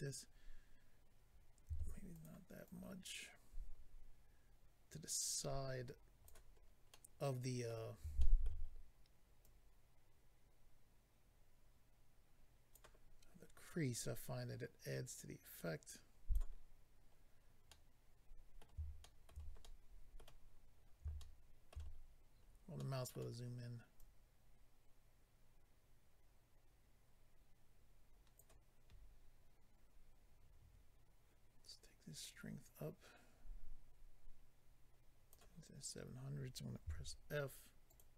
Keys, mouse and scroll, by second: 1.7 f, 2.1 click, 2.6 click, 6.6-7.0 scroll down 3, 6.9 middle click, 8.1 shift+middle click, 8.4 middle click, 8.6-8.9 scroll up 2, 9.4 click, 13.6 click, 15.2 click, 17.1-17.5 scroll down 1, 17.7 middle click, 17.7 scroll down 1, 19.0 shift+middle click, 19.3 middle click, 19.6 middle click, 20.4-21.2 scroll up 4, 21.2 shift+middle click, 21.8-22.9 scroll down 4, 22.8 middle click, 24.0 click, 32.2 click, 37.8 click, 37.8 f, 38.0 click.